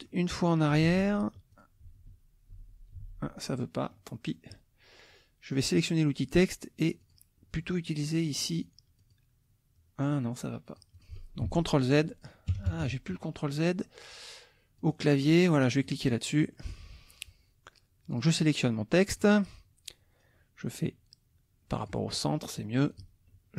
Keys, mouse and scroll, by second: 0.8 ctrl+z, 1.5 ctrl+click, 1.9 ctrl+z, 3.6 ctrl+click, 5.6 click, 7.0 click, 8.3 click, 9.0 click, 10.7 click, 11.4 ctrl+z, 12.1 ctrl+click, 12.5 ctrl+KP_Subtract, 14.8 click, 15.8 click, 16.4 middle click, 18.1 click, 19.1 click, 20.3-22.1 drag, 22.9 click.